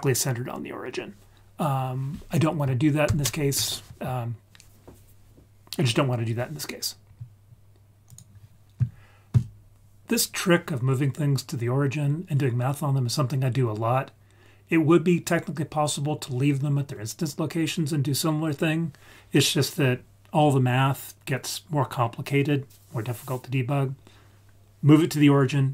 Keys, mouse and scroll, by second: 3.0 ctrl+z.